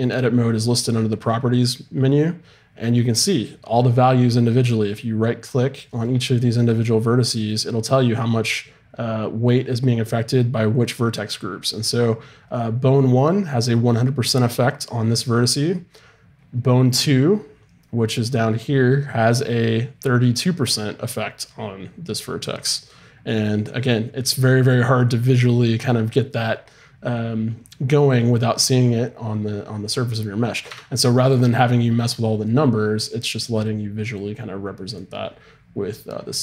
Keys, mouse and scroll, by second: 9.0-25.0 right drag, 30.7 Tab, 34.1-35.7 drag.